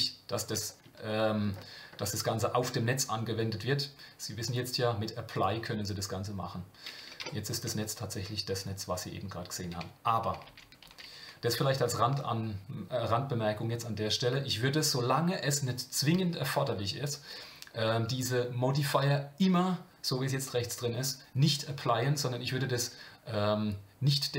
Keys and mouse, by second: 1.1-1.4 shift+middle drag, 4.4-5.4 drag, 7.2 Tab, 10.5 ctrl+z.